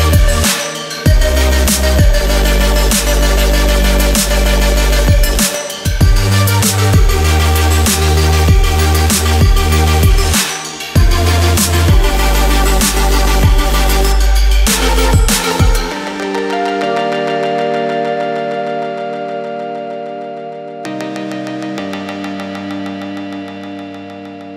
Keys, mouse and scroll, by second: 0.2 click, 1.0 click, 3.4 click, 5.4 z, 5.7 click, 12.9 click, 19.2 click, 20.9 typing, 21.6 alt+shift+click, 22.5 click.